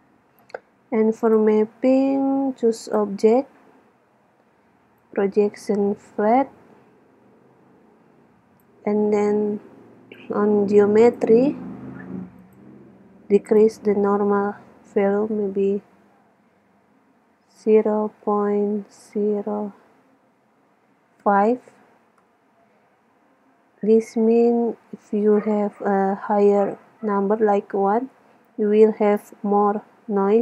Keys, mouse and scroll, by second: 1.3-2.9 drag, 5.1-6.8 drag, 10.3-12.1 drag, 12.6-15.2 drag.